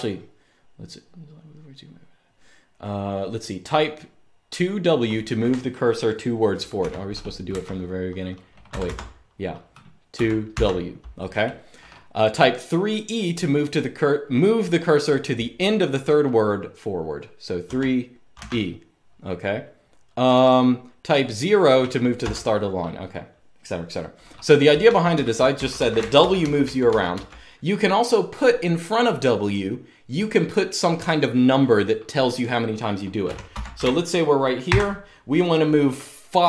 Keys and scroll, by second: 6.5-7.7 typing, 8.5 Escape, 8.7 Escape, 9.8-10.2 typing, 17.4-18.6 typing, 21.9 0, 24.6-26.6 typing, 32.7-34.4 typing.